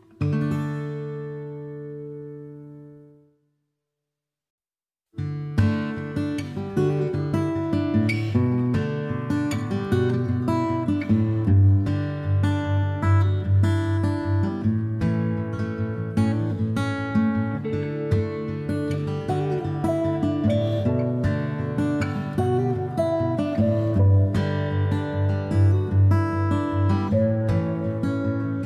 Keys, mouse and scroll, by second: 0.7-4.9 ctrl+drag, 4.9 middle click, 5.1 click, 5.1 middle click, 5.9-6.9 ctrl+drag, 6.9-7.9 middle drag, 7.9-9.0 drag, 9.0-10.8 middle drag, 10.8-11.8 ctrl+drag, 11.8-13.3 middle drag, 13.3-14.3 ctrl+drag, 14.3-16.3 middle drag, 16.3-22.3 ctrl+drag, 22.3-23.3 middle drag, 23.3-24.3 ctrl+drag, 24.3-25.7 middle drag, 25.7-26.7 ctrl+drag, 26.7-28.1 middle drag, 28.1-28.6 ctrl+drag.